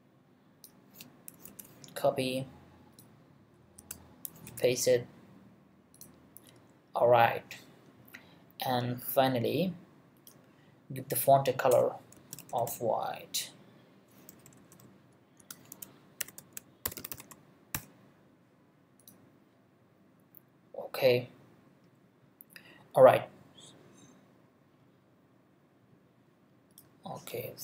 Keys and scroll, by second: 1.4 super+c, 3.8 space, 4.3 super+space, 4.5 super+v, 11.7 Return, 11.9-13.1 typing, 14.3-17.7 typing.